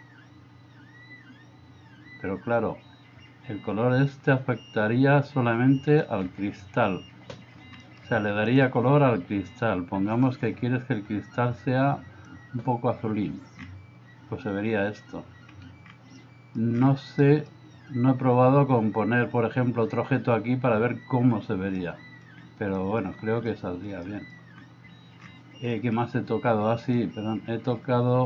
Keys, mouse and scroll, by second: 7.9 middle click, 8.5 click, 16.2 middle click, 17.3 middle click, 21.9-22.3 middle drag, 22.8 middle click, 24.1 middle click, 25.9 middle click.